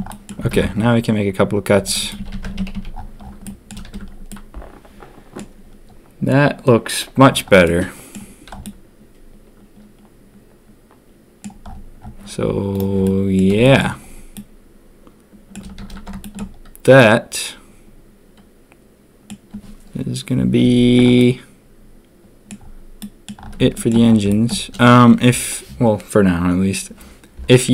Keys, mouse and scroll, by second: 0.0 click, 0.5 ctrl+r, 2.1 a, 2.3 a, 2.4 Tab, 2.5 a, 2.7 a, 3.4 drag, 3.8 ctrl+s, 4.2-5.3 drag, 5.3 middle click, 7.6-8.1 middle drag, 8.6-11.4 middle drag, 13.0-13.3 middle drag, 13.6 shift+middle drag, 14.3-15.5 middle drag, 15.8 ctrl+s, 16.2 shift+middle drag, 16.9-19.2 middle drag, 21.1-22.4 middle drag, 22.9 middle click, 23.7 shift+middle drag, 24.2 shift+middle drag.